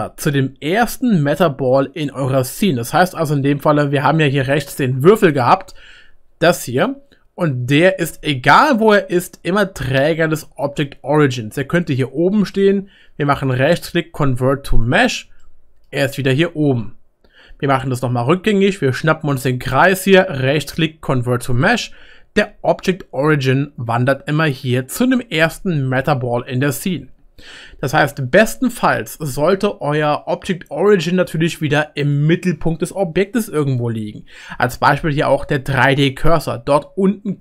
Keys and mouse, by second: 4.7 ctrl+z, 5.3 click, 7.8 g, 17.8 ctrl+z, 27.9 ctrl+z.